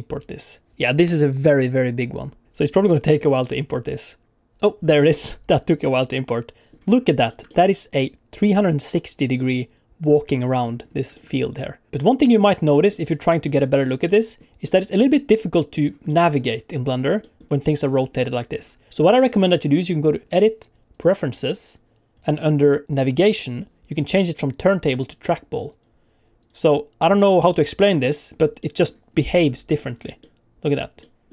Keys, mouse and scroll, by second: 5.8 middle click, 7.0 scroll up 2, 7.3 shift+middle click, 7.5 middle click, 10.8 scroll up 2, 11.1 shift+middle click, 11.3 middle click, 11.9 middle click, 11.9 scroll down 2, 12.1 middle click, 13.1-13.4 scroll up 2, 13.4 middle click, 14.0 middle click, 14.6 middle click, 15.8 scroll down 2, 16.1 middle click, 17.0 scroll up 1, 17.2 middle click, 18.1 middle click, 18.9 middle click, 20.2 click, 27.5 middle click, 28.6 middle click, 29.2 middle click, 30.2 middle click, 31.0 middle click.